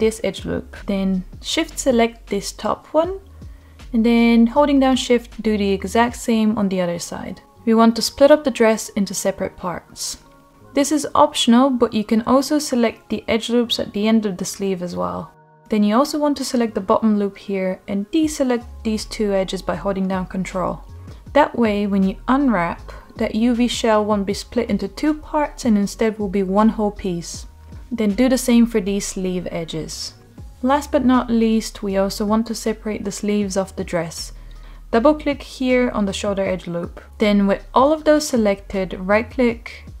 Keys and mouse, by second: 0.0-1.2 middle drag, 2.0 middle click, 3.6 shift+click, 4.6 middle click, 6.1 shift+click, 8.3 shift+click, 9.1 middle click, 10.7 middle click, 12.2 shift+click, 13.5 shift+middle click, 14.4 middle click, 16.8 shift+click, 16.9 shift+click, 19.1 middle click, 19.7-20.8 ctrl+drag, 23.9 middle click, 26.1 ctrl+click, 27.0 middle click, 28.6 ctrl+click, 30.1 middle click, 34.8 middle click, 37.1 shift+click, 38.0 middle click, 39.5-40.0 middle drag.